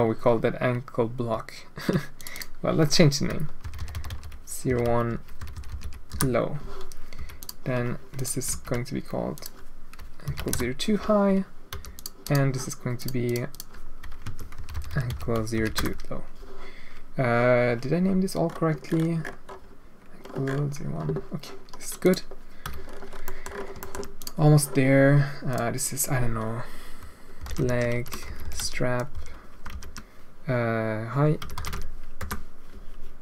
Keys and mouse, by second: 2.2-6.6 drag, 3.7 BackSpace, 3.9 BackSpace, 6.6 BackSpace, 7.1 h, 7.4 click, 8.1-10.9 drag, 11.7 h, 11.9 click, 12.2 click, 12.9 click, 13.2-16.3 drag, 14.7 BackSpace, 14.8 BackSpace, 22.0 click, 22.6 h, 23.2 middle drag, 23.8 middle drag, 24.1 click, 25.4 click, 28.3-32.9 drag.